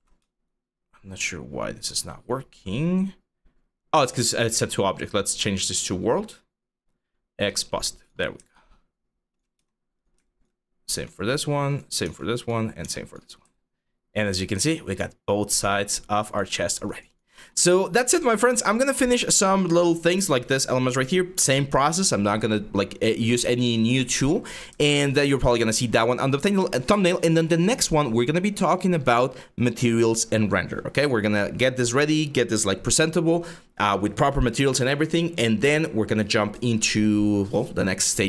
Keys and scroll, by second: 9.8 q, 10.5 g, 11.7 g.